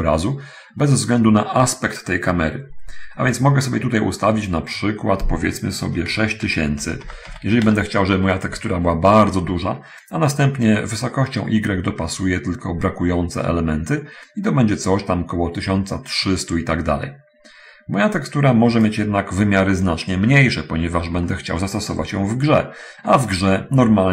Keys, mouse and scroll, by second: 3.7-5.0 drag, 5.1 click, 6.8 6, 7.0 0, 7.6 0, 8.0 Return, 11.0-18.9 drag, 21.6 shift+middle click.